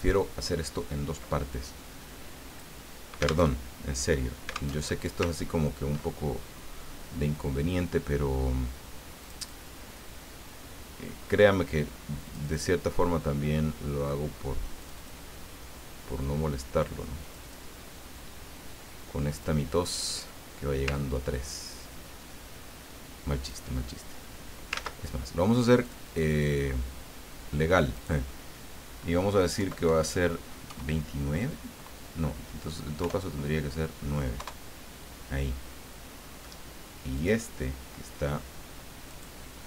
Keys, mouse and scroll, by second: 2.5 click, 3.5 alt+Tab, 4.8 alt+Tab, 5.4-5.8 ctrl+scroll up 2, 9.2 click, 12.3 click, 14.8 click, 17.2 click, 19.3 click, 20.9-23.7 ctrl+drag, 24.7 ctrl+z, 25.8 click, 27.9 click, 29.6 BackSpace, 29.8 Delete, 30.6 KP_2, 33.0 BackSpace, 34.3 KP_Enter, 37.2 click, 39.1 click.